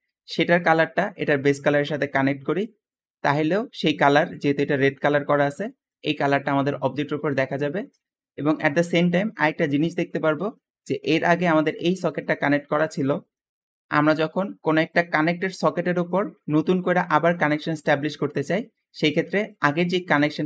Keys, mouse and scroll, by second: 4.7 `, 7.6 Escape, 18.2 middle click, 18.6 scroll down 2, 18.6 scroll up 2.